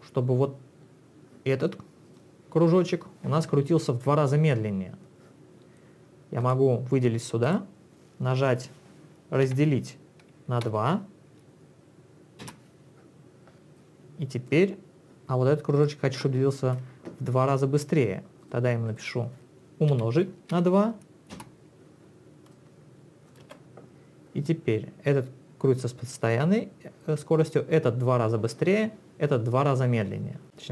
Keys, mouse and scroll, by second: 2.1 click, 6.4 click, 7.5 click, 9.5 /, 10.7 2, 12.5 Return, 13.8 click, 15.8 click, 18.5 click, 18.9 click, 19.9 *, 20.6 2, 21.3 Return, 22.5 click, 23.4 space.